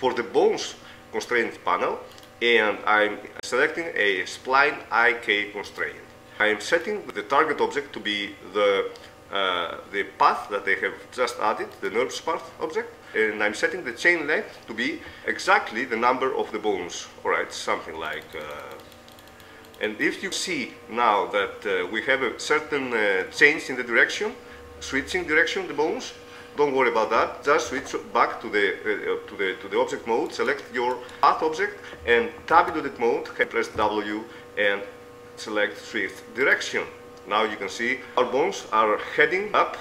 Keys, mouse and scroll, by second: 2.3-3.6 drag, 3.6-6.8 middle drag, 6.8 click, 13.1-14.1 middle drag, 18.2-21.8 drag, 23.4-25.8 middle drag, 27.7 ctrl+Tab, 30.5 right click, 32.7 Tab, 33.9 w, 38.1 Tab, 38.1-39.2 right drag.